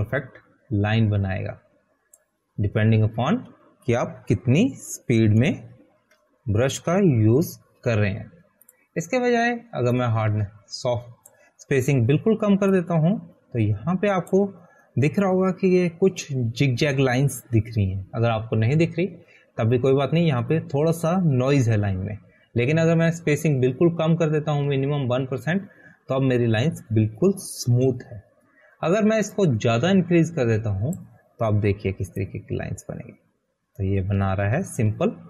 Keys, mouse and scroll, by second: 7.9 ctrl+z, 8.4 ctrl+z, 9.8 ctrl+z, 11.1 click, 32.2 click.